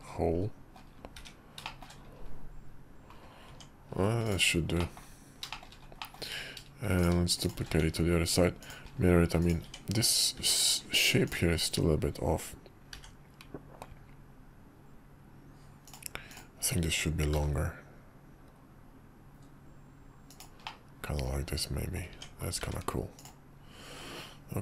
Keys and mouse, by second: 1.1 `, 1.6 shift+middle click, 3.5 Tab, 4.8 middle click, 5.5 middle click, 6.0 middle click, 6.9 click, 7.8 alt+x, 8.6 drag, 9.4 click, 9.6 Tab, 10.4 `, 11.2-12.7 drag, 12.9 r, 16.3-17.3 drag, 17.3 g, 20.6-21.9 middle drag, 22.1 Tab, 22.6 `.